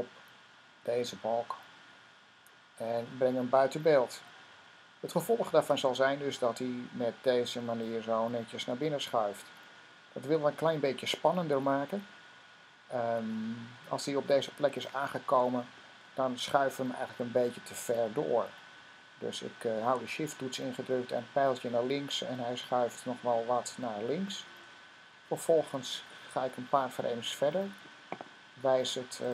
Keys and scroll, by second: 0.4-1.4 typing, 22.0 Left, 22.5 typing, 24.1 typing.